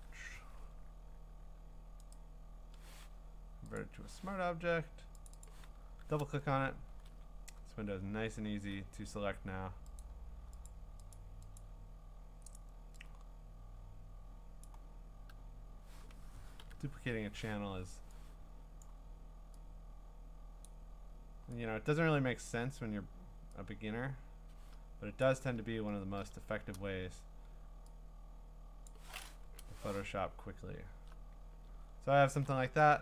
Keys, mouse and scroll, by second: 2.1 right click, 3.8 click, 5.3 click, 5.5 click, 6.4-7.2 ctrl+scroll, 10.0 click, 10.7 click, 11.1 click, 11.6 click, 15.6 click, 16.6 ctrl+i, 18.8 click, 20.6 click, 22.5 click, 25.2 click, 26.0 Return, 26.7 c, 28.8 click, 29.4 Return, 30.4-31.0 scroll down 7, 31.8-32.2 scroll.